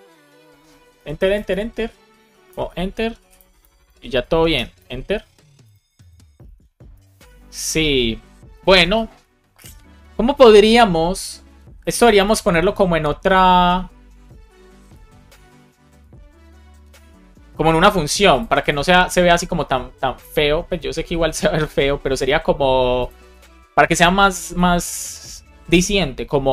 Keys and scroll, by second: 0.9 Return, 2.4 Return, 4.2 shift+super+Left, 4.5 BackSpace, 4.9 Return, 6.4 shift+super+Left, 6.8 BackSpace.